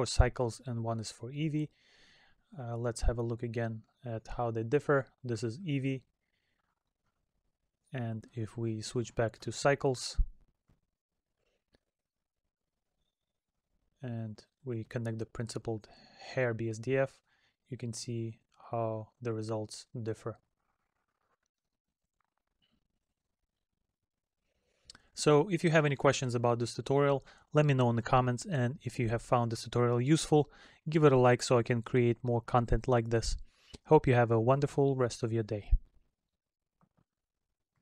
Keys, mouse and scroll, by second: 2.9 middle click, 6.1 middle click, 7.4 middle click, 18.7 middle click, 23.9 middle click.